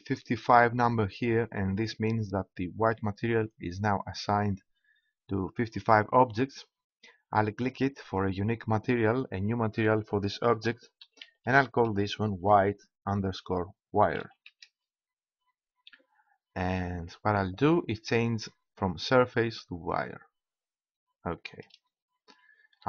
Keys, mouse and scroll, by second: 7.7-10.4 drag, 19.7-21.3 drag, 21.3-22.8 middle drag.